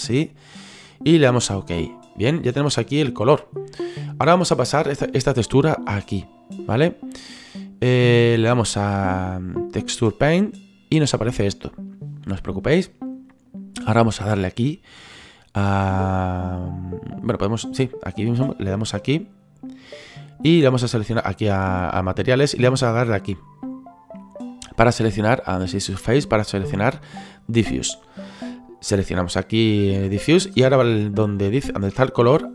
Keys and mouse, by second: 1.7 click, 6.3 right click, 7.0 click, 10.2 click, 11.2 middle click, 18.9 click, 20.5 click, 22.7 click, 27.7 click.